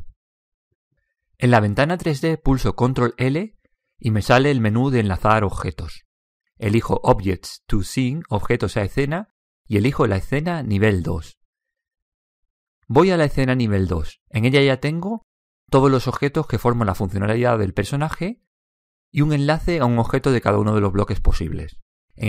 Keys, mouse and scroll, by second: 3.1 ctrl+l, 3.9 ctrl+l, 12.7 click.